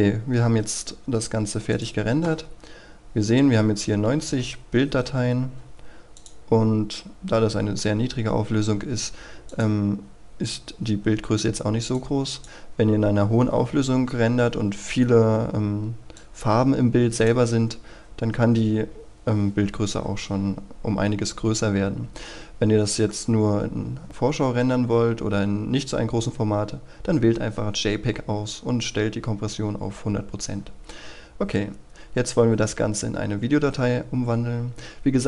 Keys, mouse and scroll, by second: 2.5-4.0 scroll down 1, 4.2 ctrl+a, 4.6-6.2 scroll down 1, 6.2 click, 6.6-7.7 scroll down 1, 7.7 scroll up 1, 8.0-9.5 scroll down 1, 9.5-17.4 drag, 22.8-24.1 scroll up 1, 24.1-25.9 scroll down 1, 25.9-28.2 scroll up 1, 28.2-33.0 scroll down 1, 33.0-35.2 scroll up 1.